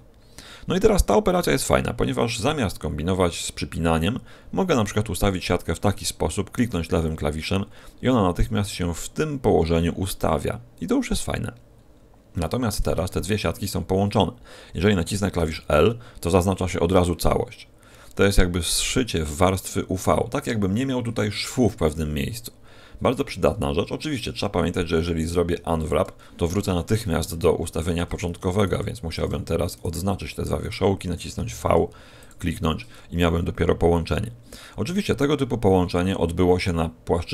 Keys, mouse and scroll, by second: 11.6-12.9 scroll up 8, 12.9 shift+middle click, 13.8-14.5 scroll down 5, 15.4 l, 25.2 u, 27.6 a, 28.5 alt+shift+right click, 29.7 shift+right click, 31.4 v, 32.2 click, 34.7-36.6 scroll up 4.